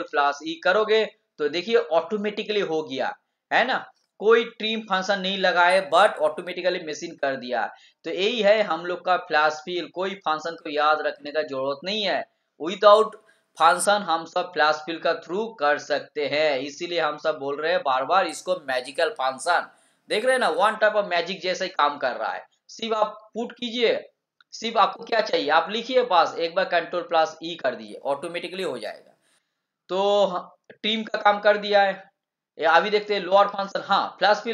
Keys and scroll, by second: 0.0 ctrl+e.